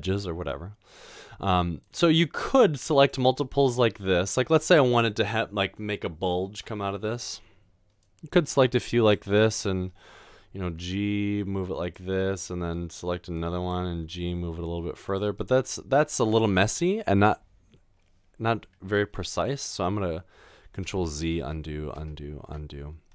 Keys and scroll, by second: 13.9 typing, 20.9 ctrl+z, 21.5 ctrl+z.